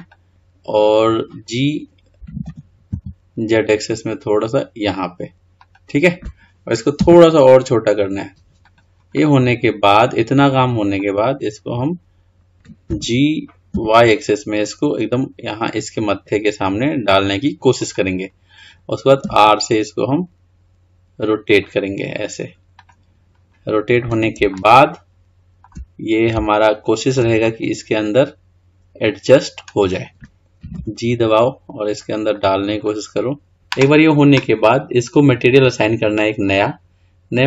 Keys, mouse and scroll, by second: 8.8 s, 9.3-12.4 middle drag, 23.5-24.7 scroll up 2, 24.7-30.6 shift+middle drag, 31.3 g, 33.1 middle click, 36.6-37.4 drag.